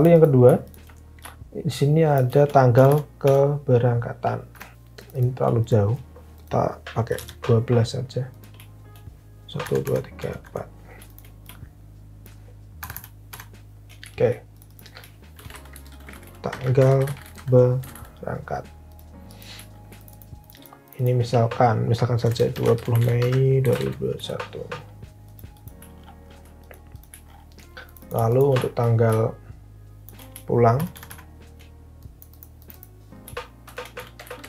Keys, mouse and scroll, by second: 2.7 shift+Down, 2.9 shift+Down, 3.1 shift+Down, 4.5 shift+Down, 4.7 shift+Up, 6.8-7.6 typing, 9.6 Down, 9.7 Down, 10.1 Down, 10.4 Down, 12.8 shift+Down, 13.0 shift+Down, 13.3 shift+Down, 15.0-18.4 typing, 21.8-24.3 typing, 25.4 typing, 30.7 shift+Down, 30.8-31.6 typing, 33.4-34.4 typing.